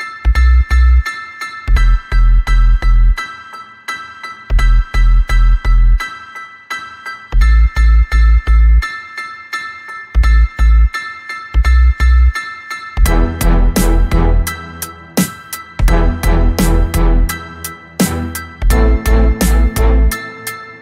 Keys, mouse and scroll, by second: 0.5 click, 1.6 ctrl+d, 1.9 ctrl+click, 3.9 ctrl+click, 5.1 ctrl+click, 7.1 click, 8.6 ctrl+click, 9.1-10.5 ctrl+drag, 10.7 ctrl+click, 11.3 ctrl+click, 12.4-15.2 drag, 15.6 click, 16.3 shift+click, 16.9 shift+click, 17.5-20.5 ctrl+shift+drag, 20.7 ctrl+click.